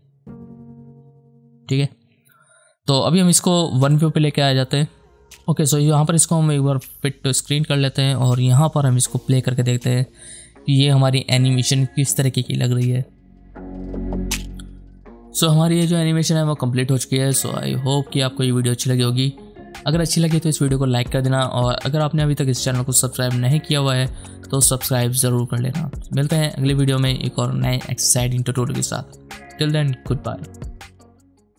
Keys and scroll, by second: 6.5 shift+/.